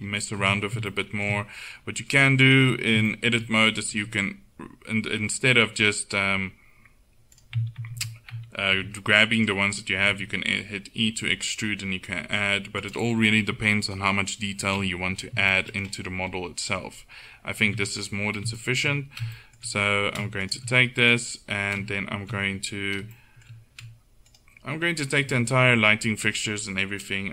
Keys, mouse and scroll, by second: 0.5 Tab, 4.0 click, 4.0 e, 7.9 ctrl+z, 8.8 g, 10.1 e, 14.5-15.5 middle drag, 17.7 Tab, 20.5 right click, 21.2-23.2 right drag, 23.2-24.5 middle drag, 24.5 right click, 24.8 click, 25.0-27.3 right drag.